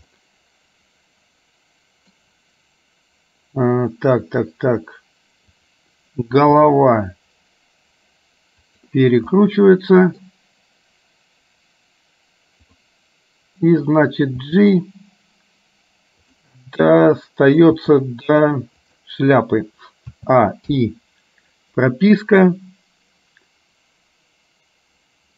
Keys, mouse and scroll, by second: 0.1-2.3 middle drag, 5.6 click, 6.8 r, 9.4 middle click, 14.4 g, 16.6-17.9 middle drag, 17.9 g, 20.3 a, 20.9 i, 22.6-25.3 drag.